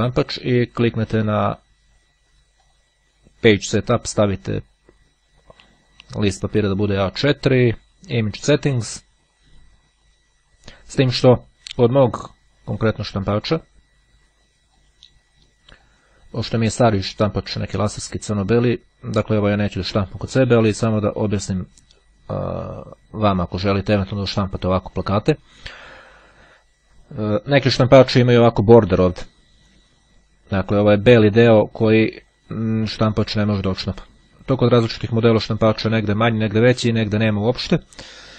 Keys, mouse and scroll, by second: 1.8-3.3 drag, 6.0-8.1 drag, 13.7-15.5 drag, 15.9-16.9 drag, 18.0-19.9 drag.